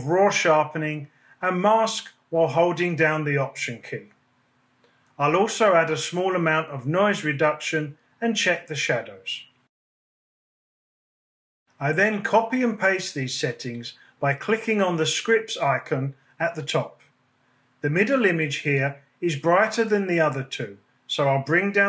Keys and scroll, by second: 7.2 Up, 13.6 super+a.